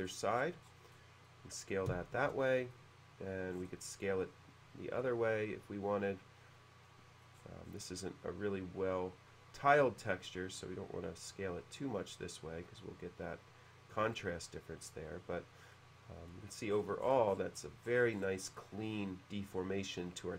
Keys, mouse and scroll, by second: 0.1-0.7 scroll down 1, 0.9-1.2 scroll down 1, 1.3-2.7 middle drag, 3.5-3.8 scroll up 1, 5.0 click, 7.3 middle click, 7.4-8.3 scroll down 2, 9.7-11.3 drag, 13.9-14.9 drag, 15.7-16.3 middle drag, 16.8-17.7 scroll up 1, 17.9-18.6 scroll up 1, 18.6 scroll up 1, 18.6-20.3 middle drag.